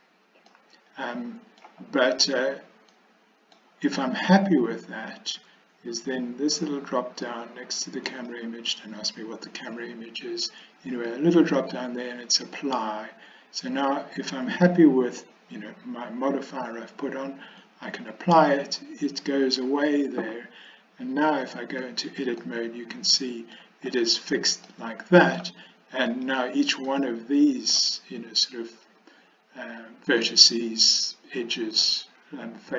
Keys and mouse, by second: 0.6-1.7 middle drag, 3.0 middle click, 8.3-9.5 middle drag, 11.1-18.0 middle drag, 21.8 Tab, 22.5-23.6 middle drag, 24.7 middle click, 26.1 click, 26.9 middle click.